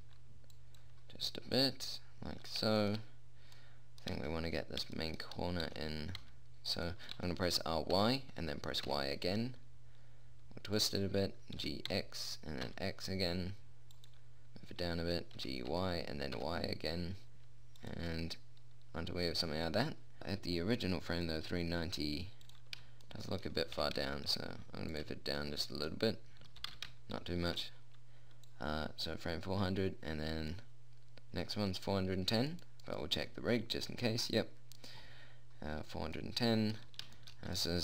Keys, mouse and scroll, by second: 6.1 r, 7.6 r, 12.0 g, 15.8 g, 22.9-25.1 drag, 24.2 g, 27.0 g, 28.9-30.6 drag, 36.6 middle click, 37.4 middle click.